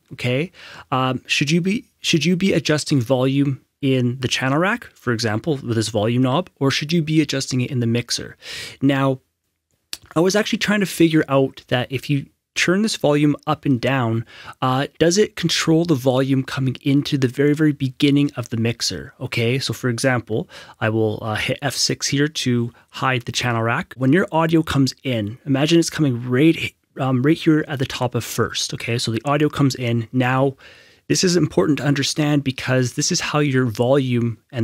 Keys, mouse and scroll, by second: 21.8 click, 23.2 F6.